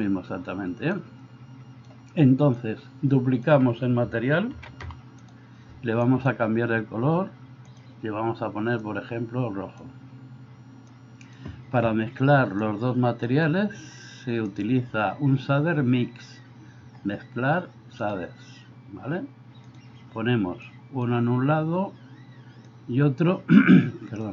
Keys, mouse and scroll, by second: 1.0-2.0 drag, 2.6-3.6 drag, 4.7 shift+d, 11.2 click, 14.6-20.8 drag, 22.9-24.3 drag.